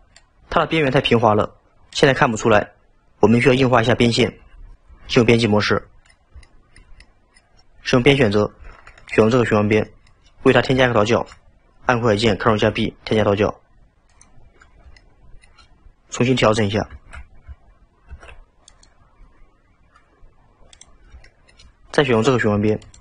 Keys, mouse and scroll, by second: 5.0 Tab, 5.8-8.0 middle drag, 8.0 2, 9.1 alt+click, 9.9-10.5 middle drag, 10.5-10.9 scroll up 2, 10.9-12.6 shift+middle drag, 12.6 ctrl+b, 14.4-15.0 scroll down 2, 15.0-16.0 shift+middle drag, 17.0 ctrl+z, 18.2 ctrl+b, 20.8 click, 21.3-22.9 shift+middle drag, 22.9 alt+click.